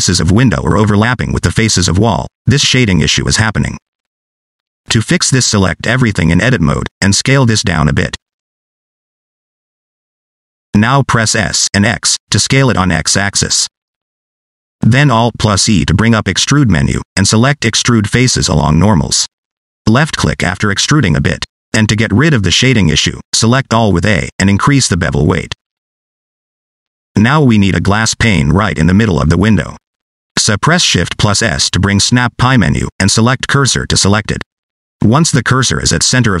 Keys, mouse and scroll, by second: 5.6 Tab, 6.5 a, 6.9 middle click, 7.6 s, 9.0 Tab, 9.2 middle click, 10.4 Tab, 10.7 middle click, 11.1 s, 12.6 middle click, 16.7 alt+e, 21.6 middle click, 23.3 a, 25.2 click, 27.0 middle click, 31.8 shift+s, 35.4 middle click.